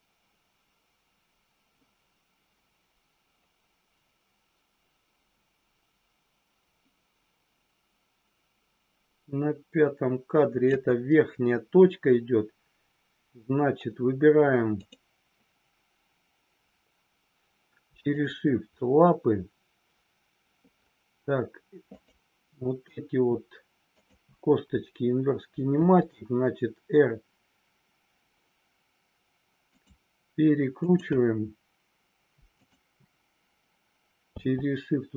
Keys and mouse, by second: 21.9 click, 23.9-24.5 shift+drag, 25.7 r, 30.7 click, 32.5 shift+click.